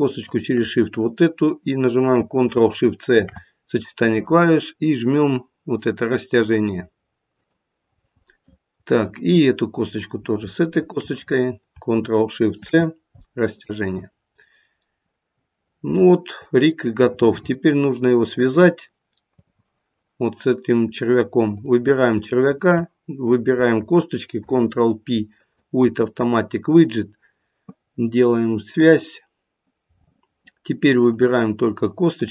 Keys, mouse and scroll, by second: 0.2 shift+click, 3.0 ctrl+shift+c, 9.4 click, 10.7 shift+click, 12.6 ctrl+shift+c, 14.3-15.6 scroll down 3, 15.6-16.1 scroll down 1, 18.5 click, 22.4 shift+click, 24.3 ctrl+p, 30.9 click, 32.2 click.